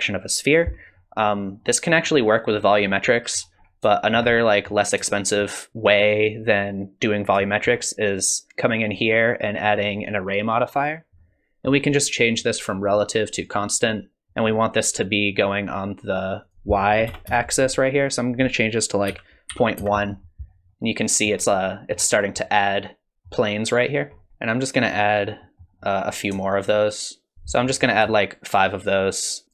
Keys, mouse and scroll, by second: 0.8-1.6 scroll up 3, 1.6 middle click, 2.8-3.6 scroll down 2, 3.1 middle click, 3.6-3.9 scroll up 2, 3.9 shift+middle click, 4.4 middle click, 5.1 shift+middle click, 7.5 shift+middle click, 8.9 click, 9.6 click, 11.2 middle click, 12.4 click, 12.9 click, 13.4 click, 13.8 click, 16.4 click, 18.2 click, 20.7 middle click, 21.6 shift+middle click, 22.1-23.7 scroll down 2, 22.4 middle click, 24.2 middle click, 24.3 middle click, 24.3-25.4 scroll up 3, 25.4 middle click, 26.6 shift+click, 27.3 middle click, 27.3 click, 27.8 middle click, 29.4 middle click, 29.4 scroll down 2.